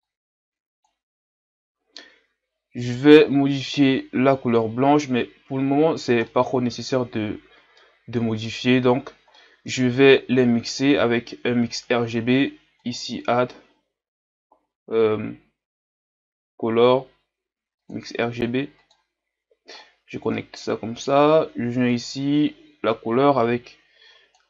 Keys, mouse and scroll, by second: 1.3-2.3 scroll up 1, 2.3-3.8 scroll up 2, 10.8-19.8 drag, 21.9 click.